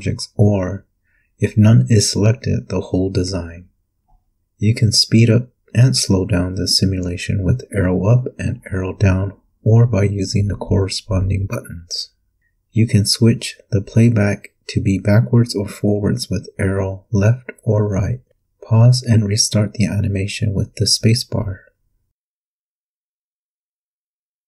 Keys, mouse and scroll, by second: 3.5 Up, 5.2 Down, 8.0 click, 8.4 click, 9.8 click, 10.0-10.5 scroll up 2, 13.8 Left, 15.4 Right, 19.2 p, 21.8 space, 23.6 space.